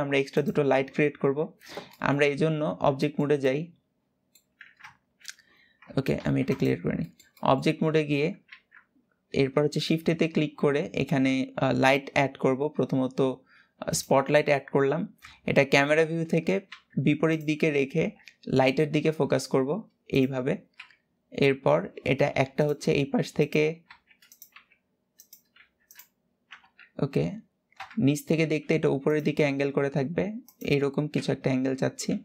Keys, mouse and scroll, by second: 0.0 click, 1.6 middle click, 1.9-2.4 scroll down 3, 2.4 Tab, 2.8-5.8 middle drag, 5.8 ctrl+alt+b, 6.3 click, 6.7-7.6 middle drag, 7.6-8.6 scroll up 3, 8.6-12.2 scroll up 2, 12.2-13.7 scroll up 1, 14.0-14.9 scroll down 3, 14.9 KP_7, 15.6 scroll down 5, 16.4 g, 17.7 KP_3, 18.7 r, 20.5 KP_7, 21.3 scroll up 6, 21.9 g, 22.5 r, 23.5 g, 24.2 r, 25.3 g, 26.3 KP_3, 27.5 KP_1, 28.3 r, 28.9 g, 30.8 KP_7, 31.8 g.